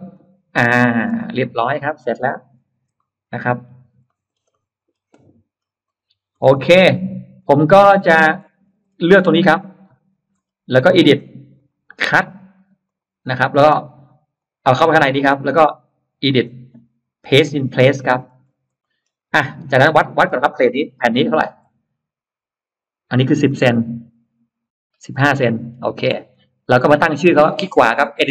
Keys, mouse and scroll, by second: 0.0 click, 0.4 middle click, 1.2 click, 1.2 space, 1.4 click, 1.6 click, 2.0 scroll down 2, 2.6 Delete, 2.8 middle click, 3.6 scroll down 2, 4.0 middle click, 4.2 scroll down 2, 4.4 middle click, 5.4-6.1 scroll up 2, 6.3-6.9 scroll up 4, 6.5 space, 7.2 click, 7.6 scroll down 2, 8.1-8.8 scroll up 4, 8.9 middle click, 9.7 shift+click, 10.2 middle click, 11.4 click, 12.7 click, 14.2 click, 14.8 click, 15.0 click, 16.1 click, 17.2 click, 18.0-19.2 scroll up 2, 18.6 middle click, 19.7-21.0 scroll up 2, 20.0 middle click, 21.2 scroll up 1, 21.8 t, 25.0-25.3 scroll down 1, 25.0 space, 25.3 middle click, 25.3 scroll up 1, 25.5 scroll down 1, 26.2 click, 27.2 right click, 28.2 click.